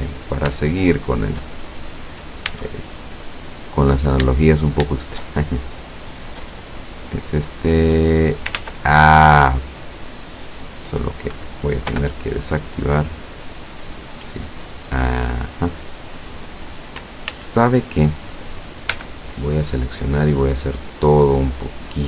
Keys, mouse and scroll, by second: 0.0-0.5 scroll up 1, 0.9 shift+middle click, 1.7-2.1 shift+scroll up 1, 2.5 a, 3.9 right click, 4.5 shift+right click, 5.3 shift+right click, 6.1 shift+right click, 6.8-9.1 shift+drag, 8.7 ctrl+z, 9.4-10.1 scroll down 4, 12.0 o, 13.1-16.5 drag, 17.4 ctrl+z, 19.0 l, 20.4-22.0 drag.